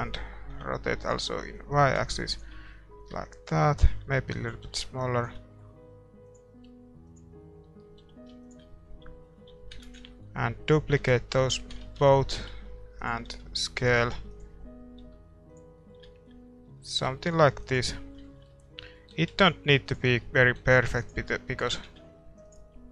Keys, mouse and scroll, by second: 1.5-4.8 drag, 3.9 s, 4.6 g, 5.3 middle click, 5.8 s, 6.6 g, 8.0 g, 9.0 a, 9.5 a, 9.8 shift+d, 11.0 f, 11.8 ctrl+z, 12.3 g, 13.3 s, 14.0 g, 15.0 s, 15.7-17.0 middle drag, 17.0 r, 19.1 r, 20.6 g, 21.7 r.